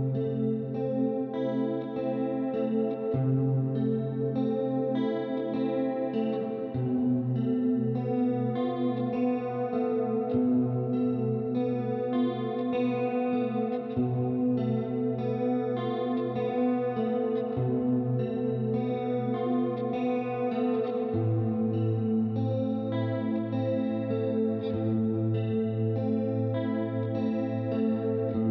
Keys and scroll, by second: 3.8-5.7 typing, 8.1 ctrl+alt+v, 9.4 ctrl+alt+2, 10.1-14.5 typing, 16.1-21.9 typing.